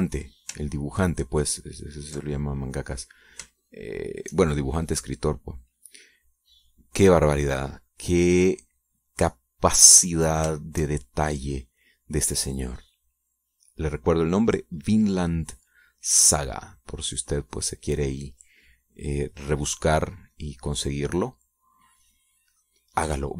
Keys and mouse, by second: 2.4 ctrl+click, 3.2 ctrl+click, 4.6-5.7 shift+drag, 6.0-11.8 shift+drag, 11.9 shift+click, 12.3-16.5 shift+drag, 16.8-21.5 drag, 21.6-23.3 drag.